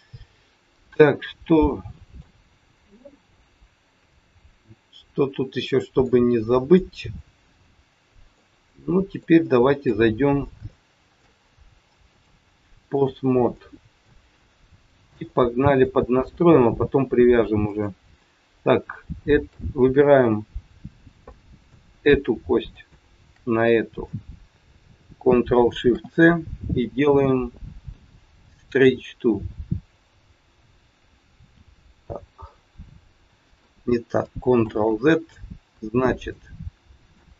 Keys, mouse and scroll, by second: 4.7-5.0 scroll down 2, 5.2 scroll up 2, 5.5 middle click, 6.3 scroll down 1, 6.8 middle click, 8.8 middle click, 9.4 shift+middle click, 9.6 shift+middle click, 10.0 middle click, 10.6 shift+scroll up 1, 10.7 shift+middle click, 12.0 click, 13.5 middle click, 14.3-14.7 scroll up 1, 14.7 shift+middle click, 15.1 middle click, 16.4-16.8 scroll up 1, 17.5 click, 21.3 middle click, 22.8 shift+click, 34.5 ctrl+z, 36.0 click, 37.0 click.